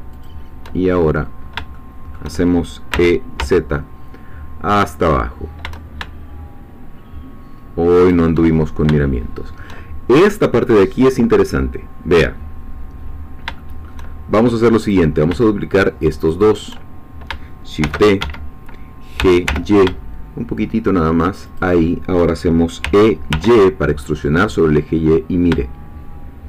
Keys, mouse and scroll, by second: 0.1 ctrl+shift+click, 1.4 scroll down 3, 1.7-2.7 shift+middle drag, 2.9 e, 3.4 z, 8.0 shift+click, 8.6 shift+scroll down 2, 9.0-10.2 shift+middle drag, 13.2 scroll up 2, 13.6 shift+middle click, 14.9 click, 16.3 shift+click, 17.8 shift+d, 18.2 Escape, 19.2 g, 19.5 y, 21.5 shift+click, 22.8 e, 23.3 y.